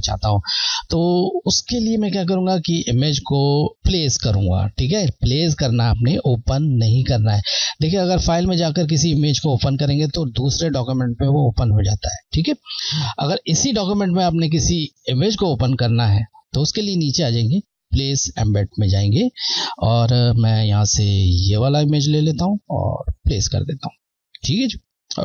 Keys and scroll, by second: 8.7 Left, 8.7 typing, 18.8 Left, 18.8 typing, 22.0 Left.